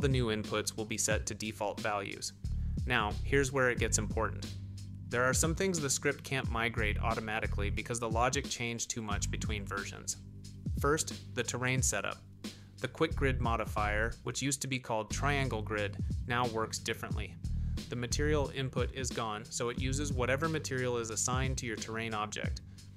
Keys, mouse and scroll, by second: 6.9-8.0 shift+middle drag, 8.5-9.1 middle drag, 13.1 click, 14.9 click, 20.6 click, 22.6 click.